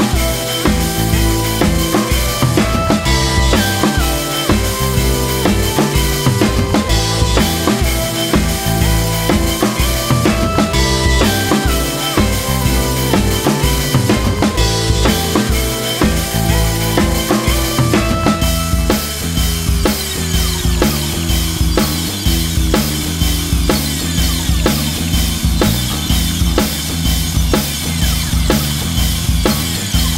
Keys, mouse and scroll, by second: 0.0-2.7 typing, 0.5 scroll down 1, 0.6 shift+middle click, 0.7 scroll up 2, 1.6 alt+m, 1.8 scroll up 1, 1.9 click, 1.9 middle click, 2.8 scroll up 1, 3.3 shift+click, 3.4 alt+m, 3.7 click, 3.8 g, 4.0 click, 4.0 g, 4.5 g, 4.9 shift+click, 5.0 alt+m, 5.2 shift+click, 5.3 alt+m, 5.6 Left, 5.8-14.2 typing, 6.4 click, 6.6 click, 6.9 shift+middle click, 7.4-8.1 scroll down 2, 7.5 shift+middle click, 8.4 click, 8.7 scroll down 1, 9.4 scroll up 1, 11.4 alt+click, 11.8 Tab, 11.8 middle click, 12.1 scroll up 1, 12.2 middle click, 12.3 click, 12.8 click, 13.3 shift+middle click, 14.2 click, 14.4 scroll down 1, 14.5-15.0 middle drag, 15.2-16.3 typing, 15.4 Tab, 16.4 scroll down 1, 16.4-17.0 middle drag, 17.1 shift+middle click, 17.4 scroll down 6, 17.5 scroll up 5, 17.6 click, 18.3 shift+middle click, 18.6 KP_1, 18.8 scroll up 3, 18.9 2, 19.1 middle click, 19.2 alt+shift+click, 19.4 alt+shift+click, 19.6 middle click, 19.7 alt+shift+click, 20.0 ctrl+z, 20.4 shift+click, 20.7 shift+middle click, 21.0 shift+click, 21.1 scroll down 1, 21.1 shift+middle click, 21.5-21.9 scroll up 2, 21.6 shift+middle click, 21.9 alt+shift+click, 21.9 middle click, 22.1 shift+click, 22.2 shift+click, 22.3 middle click, 22.6 alt+shift+click, 22.7 middle click, 23.2 middle click, 23.4 scroll up 2, 23.4 shift+click, 23.6 middle click, 24.0 shift+click, 24.2 scroll down 1, 24.2 middle click, 25.2 scroll down 1, 25.2 shift+middle click, 25.5 shift+click, 25.8 shift+click, 25.9 shift+middle click, 25.9 scroll up 1, 26.2 shift+middle click, 26.4 middle click, 26.5 ctrl+e, 26.9 scroll down 2, 26.9 shift+middle click, 27.3 click, 27.5 alt+click, 27.7 shift+click, 27.9 shift+middle click, 28.6 scroll up 1, 28.7 ctrl+e, 28.9 shift+middle click, 29.2 Tab, 29.6 a, 29.8 shift+n, 29.9 Tab, 30.0 shift+middle click, 30.1 Tab.